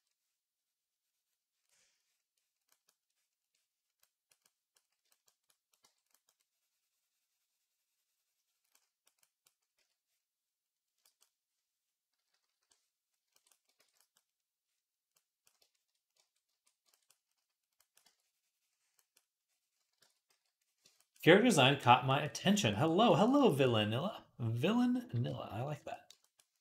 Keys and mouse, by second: 5.5 click, 5.7 v, 6.1-8.7 drag, 8.7 click, 9.0 click, 9.6 d, 10.9-16.0 ctrl+drag, 12.0 [, 12.1 [, 12.3 [, 12.4 [, 13.6 ctrl+z, 16.4 ctrl+z, 17.8-22.1 drag, 19.8 ctrl+z, 20.1 d, 23.5-26.6 drag.